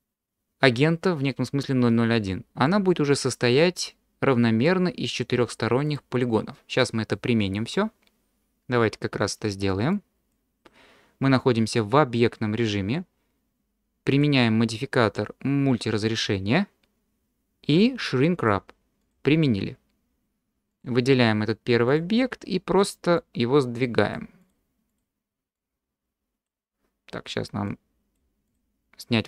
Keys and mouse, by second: 2.6-4.6 middle drag, 5.9 click, 6.8-7.1 middle drag, 9.9 click, 14.3-16.5 drag, 18.5-19.3 drag, 20.7 click, 21.9 click, 23.3 click, 24.9 click, 25.6-26.5 drag, 27.7 click, 28.5 click.